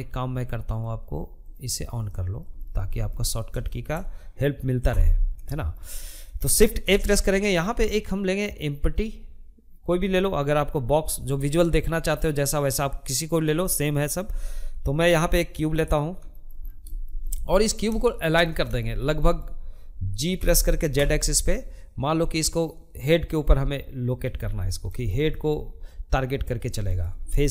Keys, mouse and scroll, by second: 0.4-3.3 middle drag, 3.3 n, 4.0-5.2 shift+middle drag, 5.2 shift+a, 14.7 shift+middle click, 15.0 scroll down 3, 15.2-18.8 shift+middle drag, 18.8 g, 22.8 scroll down 1, 23.1-25.6 middle drag, 25.6 scroll up 2, 25.8-27.5 shift+middle drag.